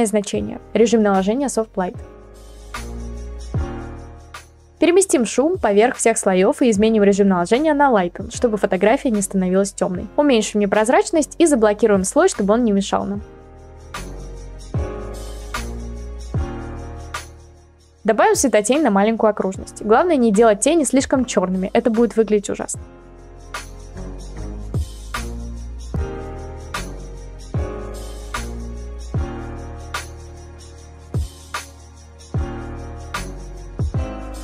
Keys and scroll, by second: 18.4 b, 19.0 ctrl+z, 19.7 ctrl+z, 20.0 [, 20.1 [, 20.2 [, 20.3 [, 26.0 ctrl+z, 26.7 ctrl+z, 27.3 [, 27.3 [, 28.2 ctrl+z, 29.0 ].